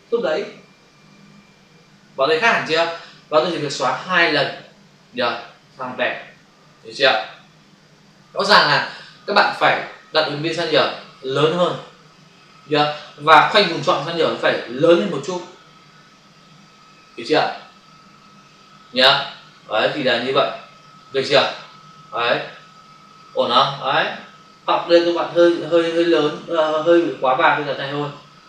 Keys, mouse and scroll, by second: 0.9 Delete, 3.9 Delete, 5.5 Delete, 6.8 ctrl+d, 22.3 ctrl+alt+z, 25.1 ctrl+d, 27.7 click.